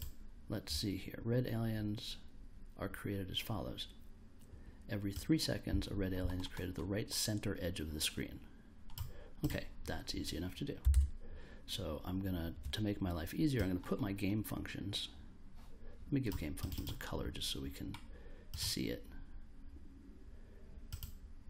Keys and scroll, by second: 10.9 super+Tab.